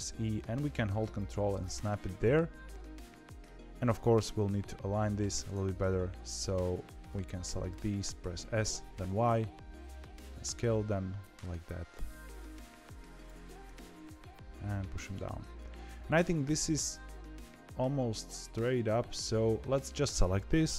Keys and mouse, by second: 1.5-3.4 middle drag, 4.2 KP_7, 7.1 click, 8.3 s, 13.4 g, 19.1 click.